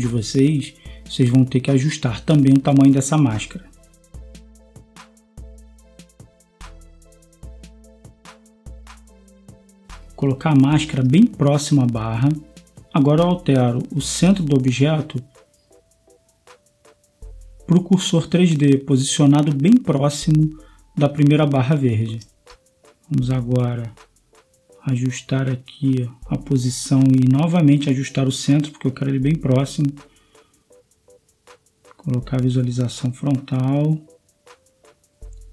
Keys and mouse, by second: 3.8 s, 7.9 Tab, 9.1-11.1 drag, 23.3 s, 24.5-25.7 middle drag, 25.8-26.7 middle drag, 28.4-30.2 drag, 30.8 middle click, 32.7 KP_3, 34.6 KP_1, 35.1 KP_5.